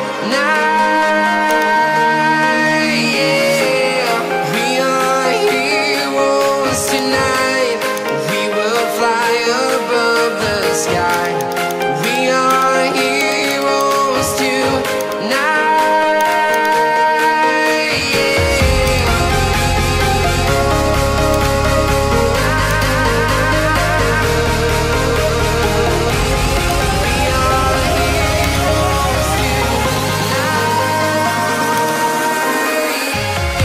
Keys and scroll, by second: 0.4 ctrl+alt+z, 0.5 ctrl+alt+z, 0.8 ctrl+alt+z, 2.6 ctrl+alt+z, 8.9 ctrl+alt+shift+e, 17.5 Return.